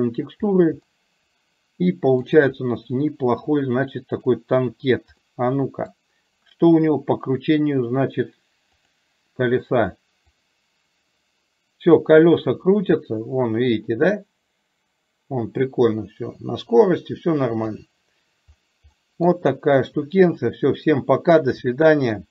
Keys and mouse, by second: 1.0-2.9 middle drag, 5.3-6.0 middle drag, 11.1-17.8 drag, 19.1-21.6 middle drag, 21.7-22.2 shift+middle drag.